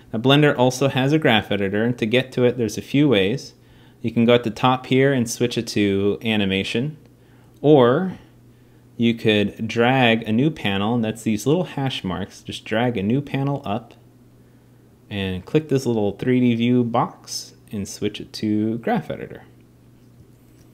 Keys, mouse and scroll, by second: 12.3 click, 12.8 click, 13.0 click.